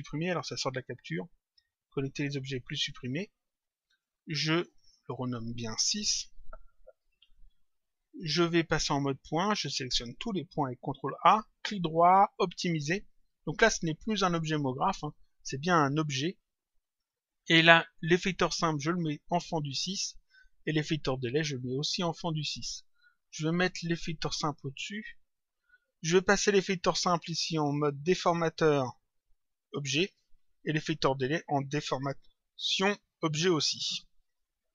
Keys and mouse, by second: 0.0 click, 1.0 right click, 2.6 click, 7.2 click, 9.2 click, 11.5 right click, 13.0 click, 14.9 click, 16.9 click, 20.6 click, 22.7 click, 26.0 click, 29.0 click, 31.9 click, 33.5 click.